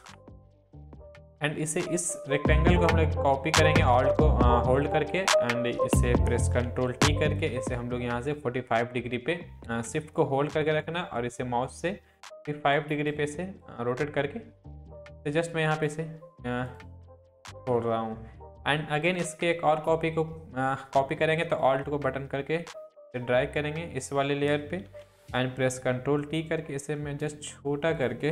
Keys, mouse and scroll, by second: 0.0 Up, 0.6 click, 2.8-6.2 alt+drag, 6.7 ctrl+t, 7.4-10.5 drag, 12.2-16.1 drag, 21.6-24.1 alt+drag, 24.8 ctrl+t, 25.6-27.5 alt+drag.